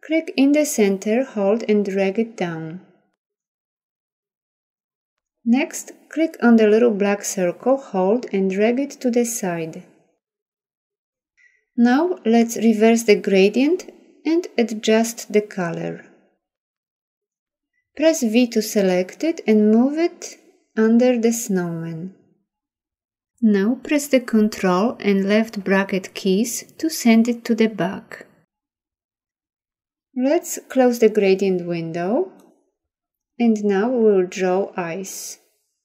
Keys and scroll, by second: 19.2 v, 24.7 ctrl+[.